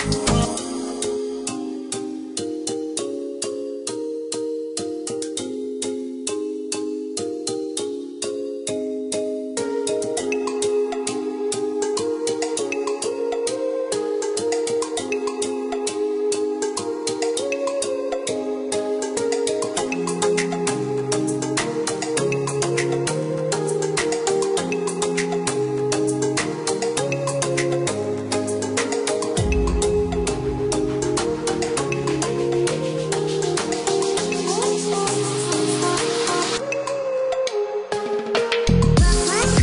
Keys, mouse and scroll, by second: 0.1 click, 1.5 space, 2.1 click, 7.3 click, 13.9 click, 14.5 click, 15.1 KP_0, 15.5 KP_Decimal, 15.7 KP_3, 16.5 KP_Enter, 17.1 Escape, 18.4 click, 19.7 space, 20.8 click, 25.9 click, 29.7 click, 33.4 click, 37.9-39.6 scroll down 1.